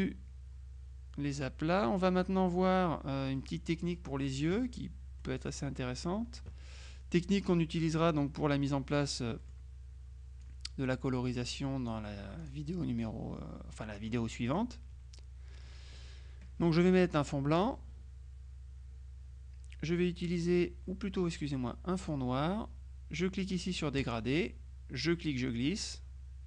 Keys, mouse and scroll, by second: 3.4 click, 5.3 middle click, 8.0 click, 8.9 click, 10.5-13.0 drag, 17.7 click, 22.1 click, 24.1 click, 25.1-26.4 drag.